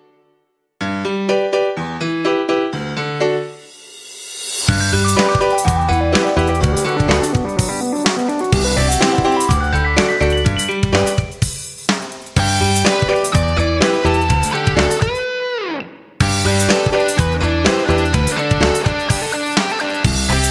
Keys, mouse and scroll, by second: 2.9 F9, 3.2 click, 4.8 ctrl+g, 5.3-6.9 drag, 11.7 F9, 11.9-20.5 drag.